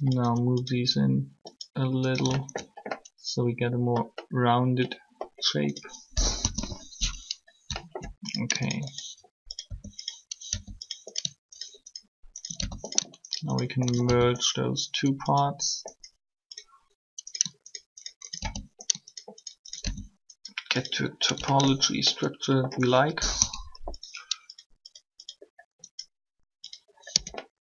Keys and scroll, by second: 6.1 3, 9.7 shift+r, 23.4 3, 27.1 Tab.